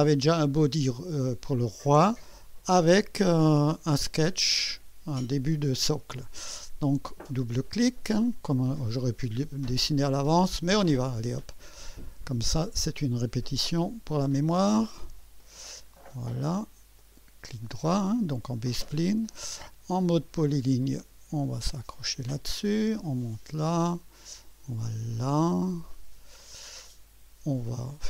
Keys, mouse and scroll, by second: 3.4 click, 7.2 click, 8.5-8.8 scroll up 1, 9.1-9.8 right drag, 11.9 click, 14.2 click, 15.4 click, 17.0 click, 17.6 right click, 20.2 click, 22.0 click, 23.2 click, 25.7 click.